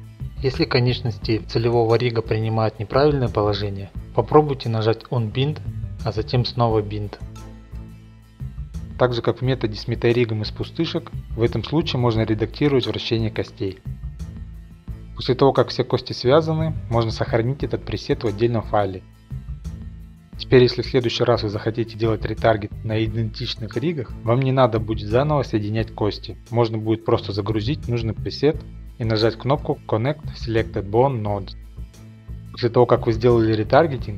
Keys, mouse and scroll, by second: 0.1 shift+middle click, 0.3 click, 0.5 middle click, 0.6 middle click, 1.1 shift+click, 1.6 click, 1.9 click, 2.6-3.1 scroll, 3.1 click, 3.5 click, 6.3-7.2 scroll, 7.2-7.8 scroll, 8.3 click, 8.4 middle click, 9.2 drag, 9.4-11.0 middle drag, 11.0-14.2 drag, 14.2-15.5 middle drag, 16.7-17.6 drag, 18.0-19.9 typing, 18.8 shift+Left, 19.7-20.7 drag, 20.7 middle click, 20.7-21.5 scroll, 21.5-24.1 drag, 23.3 a, 24.1 middle click, 24.1-24.8 scroll, 24.8-26.1 drag, 26.1 middle click, 26.1-27.0 scroll up 7, 26.5-27.9 drag, 27.9-28.6 scroll, 29.5 a, 29.6-30.4 scroll, 30.4 click, 31.1 click, 31.7 scroll, 31.8 middle click, 33.4 click, 33.8 typing.